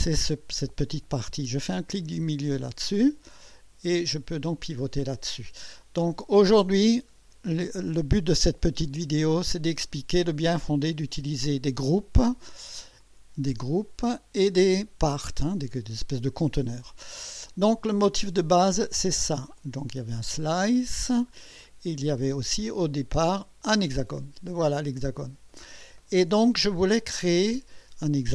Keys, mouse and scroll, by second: 2.2 middle click, 3.1-5.0 drag, 10.5 click, 13.0 click, 17.0-17.7 scroll up 4, 19.6 click, 20.9 space, 21.3 scroll down 1, 23.3 click, 23.7 space, 24.6-26.4 drag.